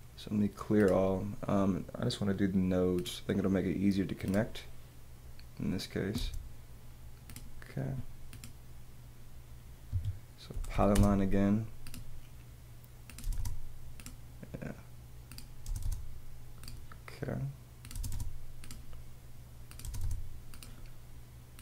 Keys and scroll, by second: 6.2 space, 9.9 Escape, 10.5 p, 13.2 space, 14.3 space, 15.6 space, 16.6 space, 17.9 space, 19.8 space, 20.9 space.